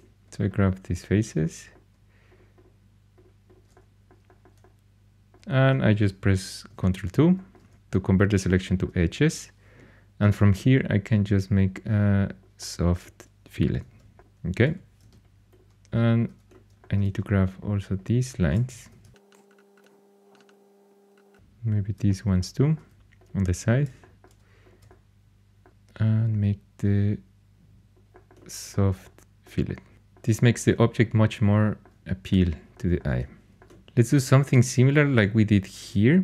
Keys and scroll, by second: 6.6 ctrl+2, 13.8 shift+super+e, 14.6 2, 18.9 shift+super+e, 35.5 4.